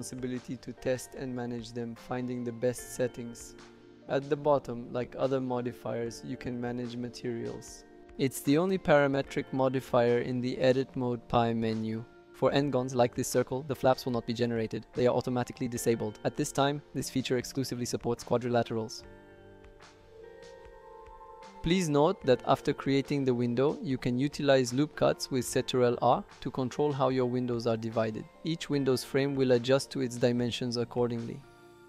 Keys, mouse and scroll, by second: 23.8 ctrl+r, 25.2 click, 25.8 click, 26.6 click, 28.5 click, 30.0 click, 30.1 click, 30.2 click, 30.3 click, 30.5 click, 31.2 click, 31.4 click, 31.5 click.